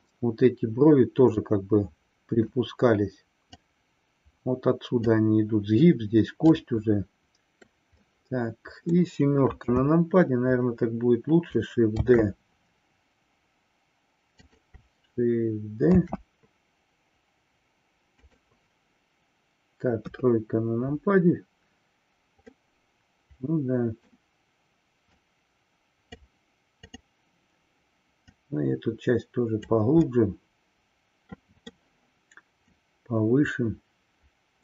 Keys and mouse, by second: 0.2-2.7 middle drag, 3.7-5.3 drag, 6.6-7.8 middle drag, 8.0-9.2 middle drag, 9.7 KP_7, 12.0 shift+d, 15.9 shift+d, 19.9 KP_3, 22.6-24.3 middle drag, 25.2-26.4 drag, 26.9 click, 28.3-29.8 drag, 30.2-31.7 middle drag, 32.7-34.6 drag.